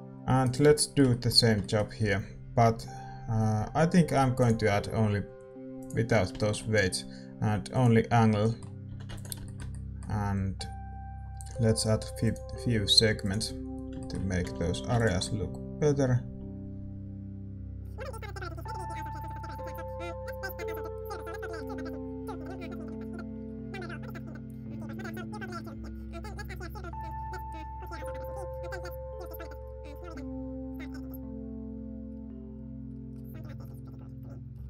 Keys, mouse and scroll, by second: 1.0-5.8 right drag, 5.8 click, 6.3-12.3 middle drag, 7.7-9.4 drag, 8.8 a, 9.4 ctrl+s, 12.3-15.2 drag, 13.7 middle click, 13.9-15.2 right drag, 14.4 a, 14.6 a, 15.2 ctrl+s, 15.2-17.7 middle drag, 17.7 click, 18.0-22.4 middle drag, 18.8 ctrl+s, 19.1 right click, 21.6 2, 22.4 shift+c, 24.9 KP_7, 26.0 ctrl+s, 26.6 shift+a, 27.0 Tab, 27.3-28.4 right drag, 27.6 click, 28.2 v, 29.5 g, 30.0-31.3 middle drag, 30.1 r, 30.7 g, 31.7-33.6 typing, 33.9-34.6 middle drag, 34.4 right click.